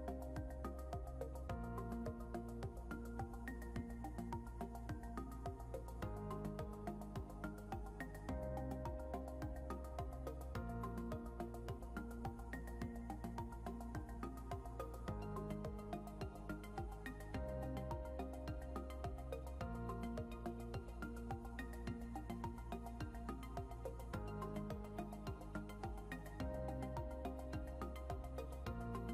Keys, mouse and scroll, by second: 12.4 scroll down 1, 13.5 scroll up 1, 16.2 ctrl+s.